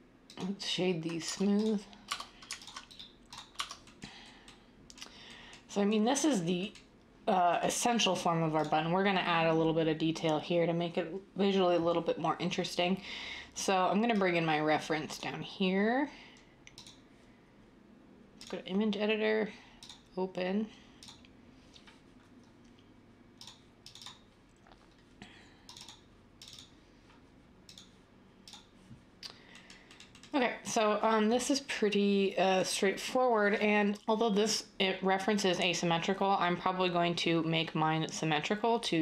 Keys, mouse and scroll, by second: 1.2 Tab, 2.1 Tab, 3.5 Tab.